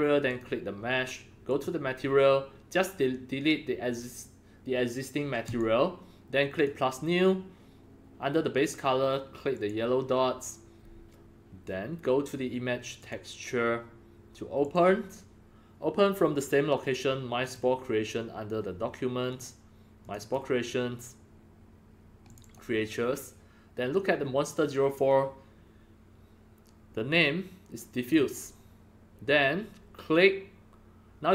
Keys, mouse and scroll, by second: 0.3 click, 1.4 click, 5.4 click, 6.5 click, 9.5 click, 13.0 click, 14.5 click, 17.4 click, 19.3 click, 20.0 click, 20.1 click, 22.2 click, 28.0 click, 28.1 click.